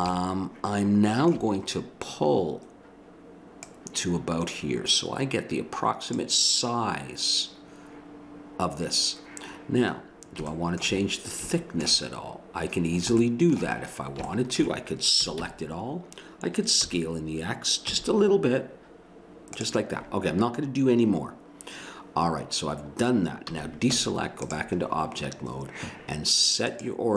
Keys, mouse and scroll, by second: 3.6-5.5 drag, 10.0-11.2 middle drag, 15.2 a, 15.4 a, 16.8 s, 23.5 a, 24.0 Tab.